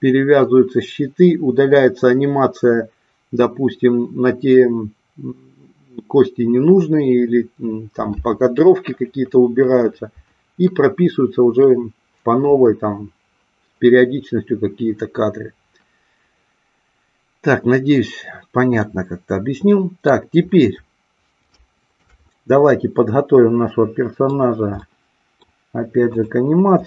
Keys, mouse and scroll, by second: 18.8-20.1 middle drag, 21.6 shift+middle click, 22.7-24.3 middle drag, 24.8 middle click, 26.1 click.